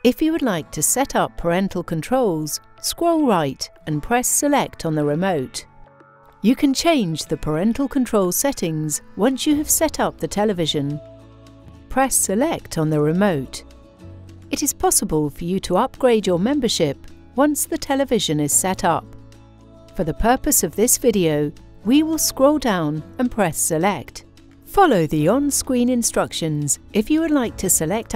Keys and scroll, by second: 3.0 Left, 4.2 Return, 12.1 Return, 22.4 Down, 23.5 Return.